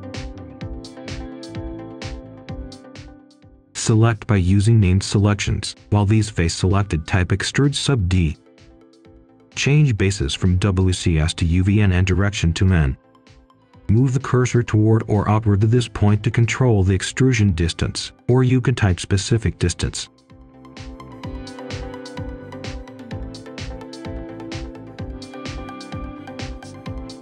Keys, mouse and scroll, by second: 1.5 scroll down 1, 2.2 click, 4.0 shift+click, 4.6 right click, 5.1-6.6 scroll up 1, 6.4-8.6 typing, 8.6 Return, 10.5 click, 13.4-14.0 scroll down 1, 14.0-14.5 scroll up 1, 14.5 scroll down 1, 15.3 right click, 16.4-16.8 scroll up 1, 18.9 click, 21.7-22.0 scroll down 1, 22.0 scroll up 1, 22.2 right click, 23.1 Tab, 24.8 click, 26.1-26.4 scroll down 1, 26.4 scroll up 1, 26.5-27.2 right drag.